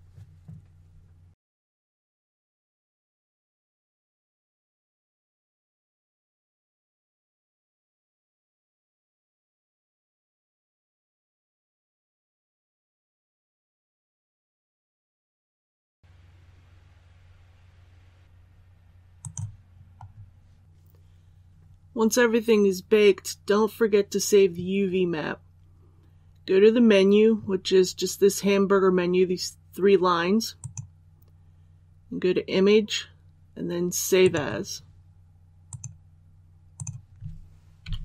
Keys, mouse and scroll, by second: 19.6-20.4 scroll down 1, 20.6 click.